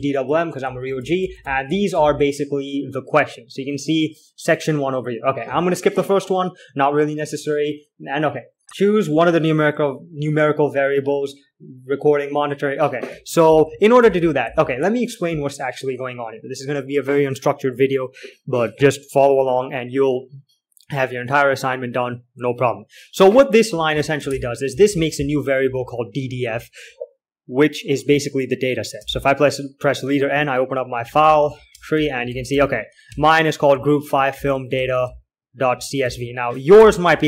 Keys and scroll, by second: 0.0 alt+k, 0.2-3.3 typing, 14.0 alt+3, 14.1-15.4 typing, 24.6-27.1 typing, 28.6-29.3 l, 29.3 space, 29.4 n, 30.8-37.2 typing.